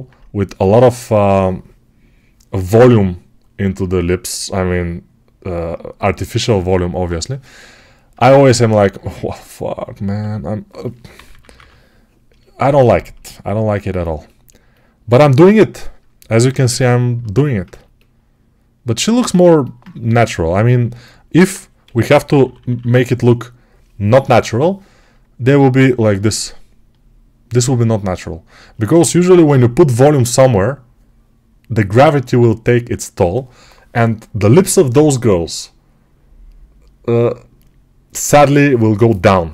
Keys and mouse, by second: 10.0 2, 11.0 [, 11.1 [, 16.0-39.5 alt+right drag, 19.9 g, 22.1 ], 22.3 ].